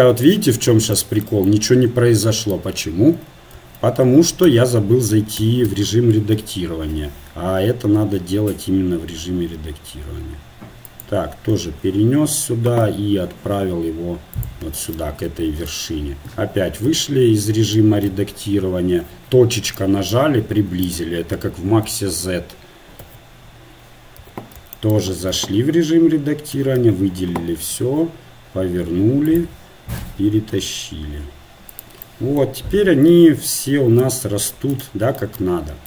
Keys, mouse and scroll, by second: 3.7 ctrl+z, 4.5 Tab, 5.4 a, 5.7 a, 6.4 KP_3, 7.9 r, 12.0 z, 12.8 g, 16.4 Tab, 16.9 z, 18.5 KP_1, 19.1 KP_Decimal, 20.9-22.0 drag, 22.0 KP_3, 23.3 KP_Decimal, 24.2 z, 25.4 Tab, 26.5 a, 26.8 a, 27.7 r, 30.0 g, 33.2 z, 34.1 Tab.